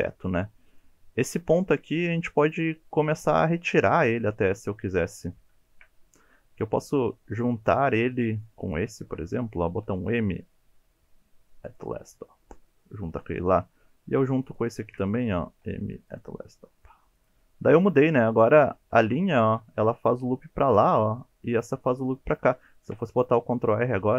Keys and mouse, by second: 2.6-3.4 middle drag, 4.4 KP_7, 5.3 alt+z, 5.6 shift+click, 9.8 m, 15.5 m, 17.2 click, 18.7 2, 19.2 alt+click, 22.8 ctrl+r.